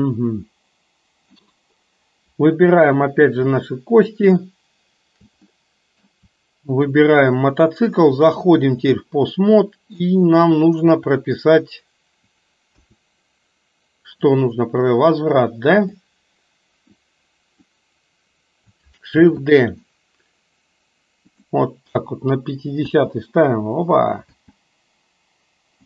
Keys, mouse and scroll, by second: 5.5-6.2 middle drag, 8.2-9.2 drag, 9.5-10.0 middle drag, 12.8 a, 14.3 click, 16.0 click, 17.0-17.7 drag, 19.3 shift+d, 23.0 space, 24.3 space.